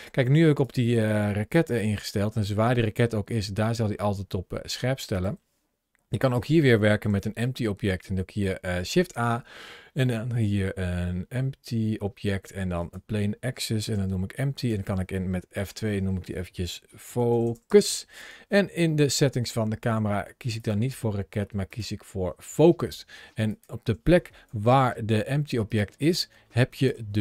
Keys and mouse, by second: 1.3 g, 4.9 right click, 6.0 shift+right click, 6.9 shift+a, 13.7 s, 14.4 click, 15.5 F2, 20.4-21.6 drag, 23.3 click, 24.3 g, 25.5 right click, 25.9 middle click, 26.7 KP_7.